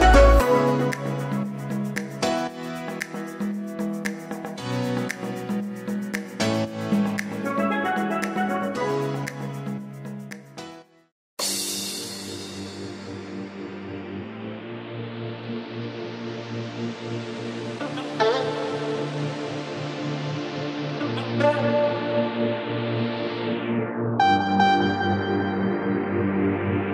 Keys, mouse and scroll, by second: 1.2-7.4 scroll down 1, 7.4-8.6 scroll down 1, 8.6-16.6 scroll down 1, 16.6-17.5 scroll down 1, 17.5-21.7 scroll down 1, 21.7-25.4 scroll down 1, 25.4-25.9 scroll down 1, 25.9-26.9 scroll down 1.